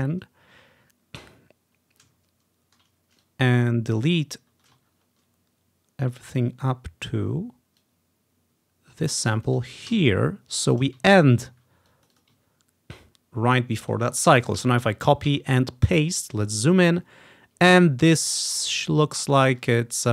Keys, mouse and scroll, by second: 2.2 scroll down 1, 3.3 click, 4.8-6.6 ctrl+drag, 5.0-6.6 ctrl+scroll up 1, 7.9-11.1 drag, 10.0 Delete, 11.2-11.7 scroll down 1, 12.0-13.3 drag, 13.3-13.7 ctrl+scroll down 1, 13.7 ctrl+scroll up 1, 14.7 ctrl+c, 14.9 Right, 15.4 ctrl+v, 16.0-17.3 ctrl+scroll up 1, 19.7 ctrl+scroll up 1, 19.9-20.1 ctrl+scroll down 1.